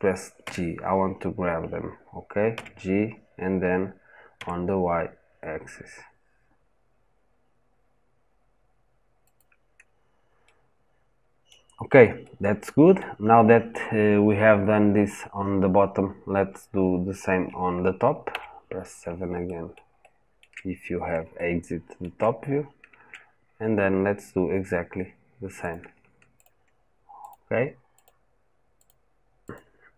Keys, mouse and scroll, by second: 2.4 g, 10.2-18.1 middle drag, 18.1 KP_7, 19.3-20.6 shift+middle drag, 20.6-21.1 scroll up 2, 21.1 shift+middle click, 22.1-23.2 scroll up 3, 23.2 scroll down 1, 25.5 click, 26.2 shift+click.